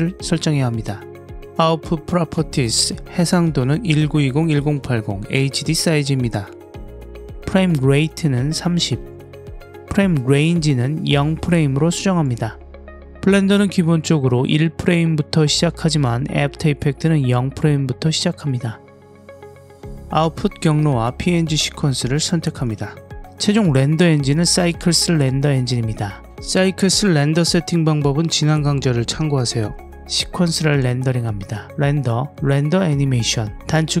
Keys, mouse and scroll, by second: 2.0 click, 9.1-10.5 drag, 15.4 click, 19.2 click, 24.8 click, 30.6-34.0 drag.